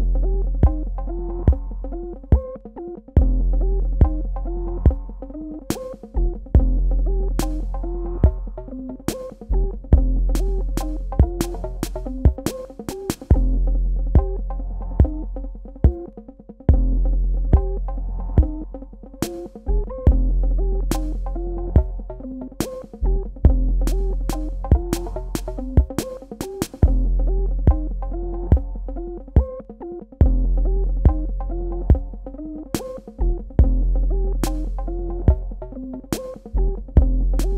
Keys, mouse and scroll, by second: 0.0-1.6 typing, 3.8 KP_Enter, 5.0 click, 8.6-10.5 typing, 10.9 Tab, 12.6 super+KP_Add, 14.7 super+KP_Subtract, 16.2 click, 17.9 KP_Add, 20.1 super+KP_Subtract, 21.2 click, 31.2 v, 31.7 click.